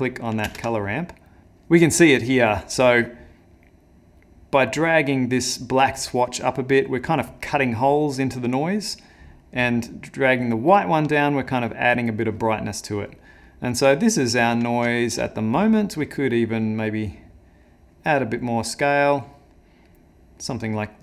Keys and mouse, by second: 0.6 ctrl+space, 2.6 click, 9.5 click, 10.5 click, 12.7 middle click, 13.9 ctrl+middle click, 14.9 shift+middle click, 15.2 middle click, 16.6 click, 19.9 middle click.